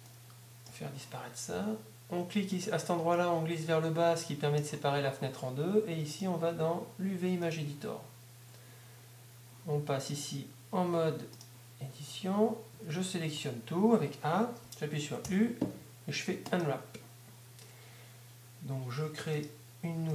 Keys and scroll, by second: 0.2 Down, 13.0 a, 13.4 a, 15.1 a, 17.1 u.